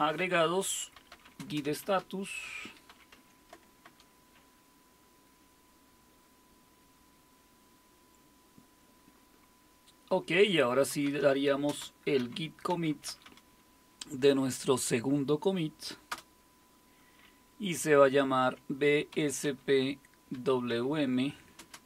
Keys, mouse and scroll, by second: 0.7-3.4 typing, 3.8 Return, 10.7-13.7 typing, 16.1 Return, 18.4-21.8 typing.